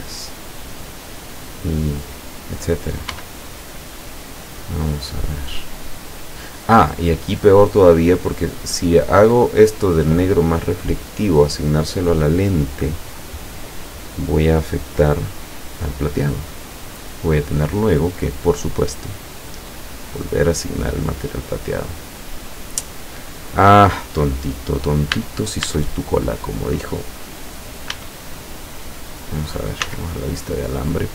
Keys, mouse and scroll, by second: 1.2 right click, 3.1 l, 4.3-7.1 middle drag, 7.1-7.6 scroll up 1, 7.8 scroll down 1, 16.4 click, 19.6 scroll up 1, 20.8 middle click, 21.5-22.7 middle drag, 22.7-23.1 scroll up 1, 23.2 scroll down 2, 25.2 a, 27.9 a, 29.9 z.